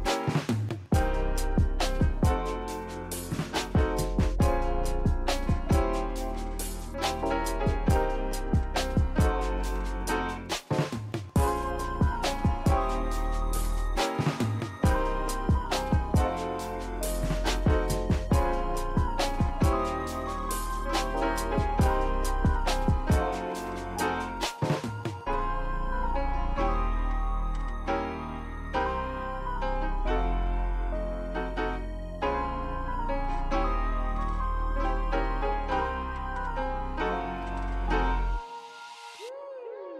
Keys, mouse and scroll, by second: 0.7 click, 5.1 ctrl+z, 6.3-7.6 drag, 8.6 click, 11.6 click, 13.6 click, 19.4-20.3 drag, 20.9 click, 26.2 click, 27.1-27.9 scroll up 2, 27.9 shift+middle click, 28.3 Tab, 28.8-30.4 scroll up 1, 31.3-32.4 drag, 33.0-36.9 drag.